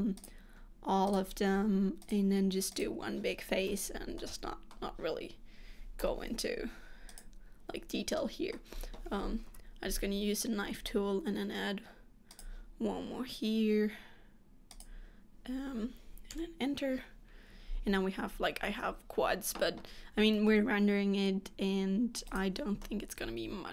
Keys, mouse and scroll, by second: 0.3 click, 1.2 shift+click, 2.1 click, 2.8 click, 3.8 f, 4.3 middle click, 6.1 z, 8.3 middle click, 9.6 k, 18.3-21.4 scroll down 2, 22.4 click, 22.9 middle click.